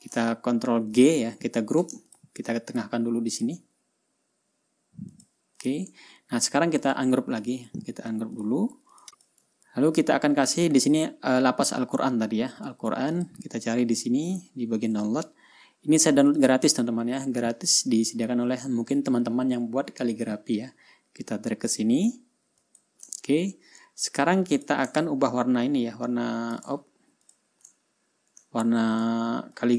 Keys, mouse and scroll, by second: 1.4 ctrl+g, 2.6 shift+click, 3.9 click, 5.6 click, 6.1 click, 6.6 ctrl+scroll up 1, 7.3 ctrl+click, 7.9 right click, 8.9 click, 9.0 ctrl+scroll down 1, 9.7 ctrl+click, 10.2-10.5 ctrl+scroll up 1, 15.5 click, 16.8 click, 20.9-22.4 drag, 23.2 click, 23.7-24.0 ctrl+scroll down 2, 25.1 click, 25.4 ctrl+scroll down 1, 26.2-27.2 ctrl+drag, 27.2 ctrl+y, 27.8 ctrl+click, 28.4 ctrl+scroll up 1, 29.0 ctrl+scroll down 2, 29.5 ctrl+click.